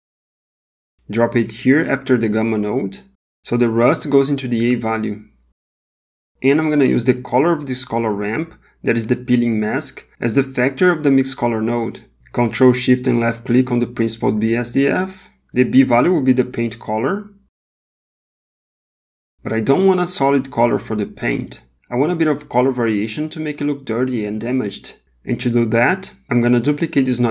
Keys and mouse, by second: 8.0 click, 8.3-10.2 drag, 13.6 ctrl+shift+click, 15.4 click, 20.5 middle click, 21.2 middle click, 21.8 click, 21.9-22.4 drag, 23.2 g, 26.2 click, 27.2 middle click.